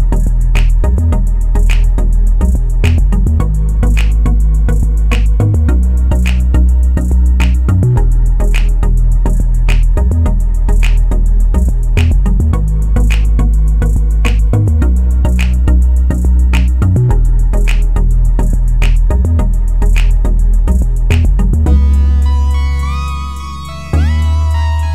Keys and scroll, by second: 10.0 1, 10.3 Return.